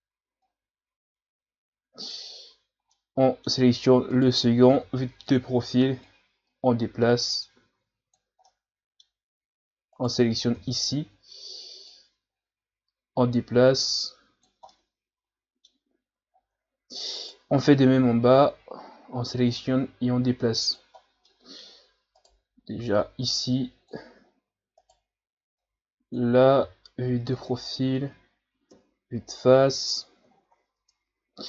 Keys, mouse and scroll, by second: 0.4-2.9 drag, 2.9-4.1 middle drag, 4.1 right click, 4.7 KP_3, 6.1-8.4 drag, 8.4-9.9 middle drag, 9.9 right click, 10.5 KP_3, 11.9-14.7 drag, 14.7-16.3 middle drag, 16.3 scroll down 3, 17.1 right click, 17.9 KP_3, 19.5-21.3 drag, 21.3 middle click, 22.1 right click, 23.0-24.2 drag, 24.2 scroll down 4, 24.8 right click, 25.6-26.6 drag, 26.6 KP_3, 28.7 KP_1, 29.2 Tab, 30.3 scroll up 4, 30.8 Tab.